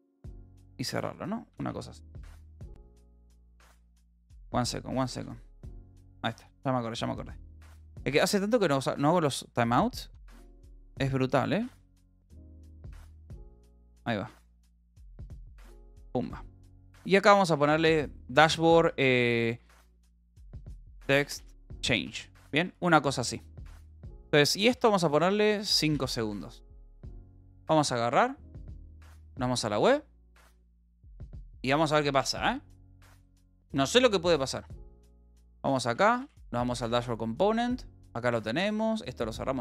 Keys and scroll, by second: 0.8 Up, 1.3 Right, 1.9 Right, 2.5 Right, 3.2 BackSpace, 5.5 Down, 6.9 Up, 7.3 Right, 7.5 Down, 8.1 Down, 8.7 d, 10.7 shift+o, 11.6 s, 11.9 t, 12.3 BackSpace, 13.5 ctrl+g, 14.3 Down, 16.2 Up, 17.8 Left, 18.7-22.2 typing, 22.6 Down, 23.7 a, 24.1 Left, 24.7 Left, 25.2 BackSpace, 25.4 5, 26.4 ctrl+s.